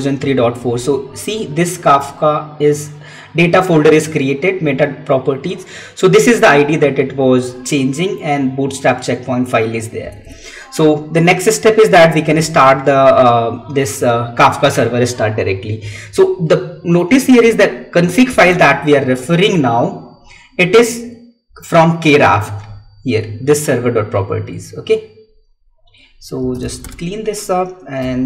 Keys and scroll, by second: 10.1 Tab, 18.9 Tab, 22.8 Escape.